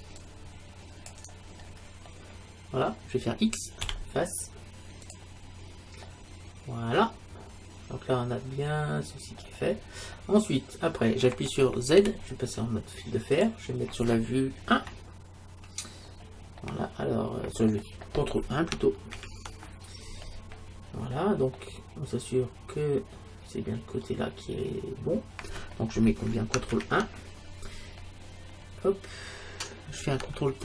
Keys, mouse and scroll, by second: 2.1 middle click, 3.9 x, 6.1 middle click, 9.8-11.9 middle drag, 12.0 z, 14.8 KP_1, 16.0 middle click, 16.6-18.1 middle drag, 18.4 middle click, 20.5-23.4 middle drag, 28.5 middle click.